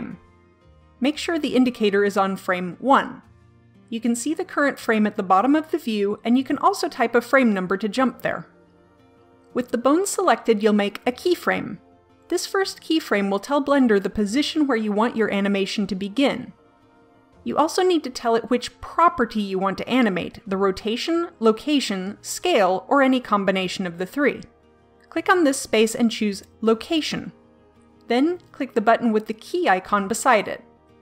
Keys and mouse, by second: 6.5-8.3 drag, 25.9-31.0 drag.